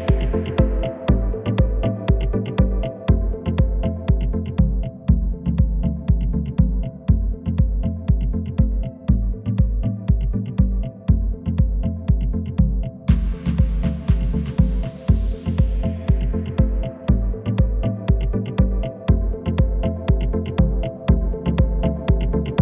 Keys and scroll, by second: 0.5 KP_4, 2.3 Escape, 3.6 r, 6.5 KP_4, 7.8 Return, 15.4 shift+s.